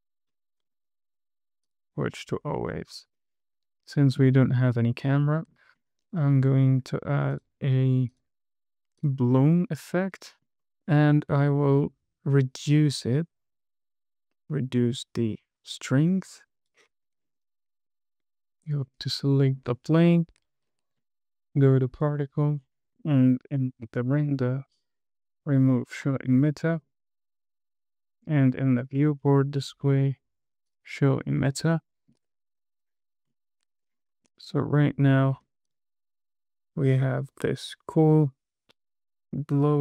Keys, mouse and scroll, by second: 0.2 click, 1.0-2.5 drag, 2.7-3.3 scroll up 2, 3.5 shift+middle click, 6.1-6.5 scroll up 2, 6.7 shift+middle click, 7.7 click, 8.5-9.4 drag, 13.3-17.1 drag, 17.8 click, 18.3 middle click, 19.1 scroll up 2, 19.6 shift+middle click, 21.3-21.8 scroll up 1, 22.3 click, 23.1 scroll down 4, 26.4-27.0 scroll down 1, 29.1 click, 29.6-30.2 scroll down 2, 31.0 click, 31.6 scroll down 1, 32.1 shift+middle click, 32.9 KP_0, 33.6-34.2 scroll down 3, 34.4 shift+middle click, 34.8 space, 35.8 space, 36.0 click, 36.3 space, 38.4 scroll up 2.